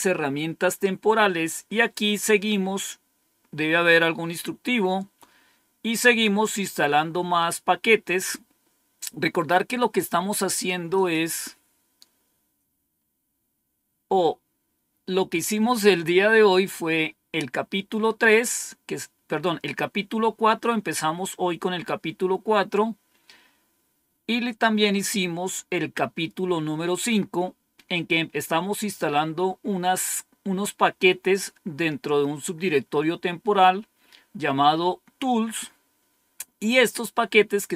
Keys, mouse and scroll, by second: 10.8 click, 12.9-13.4 scroll down 1, 13.4-13.9 scroll down 1, 24.2-26.1 scroll down 1.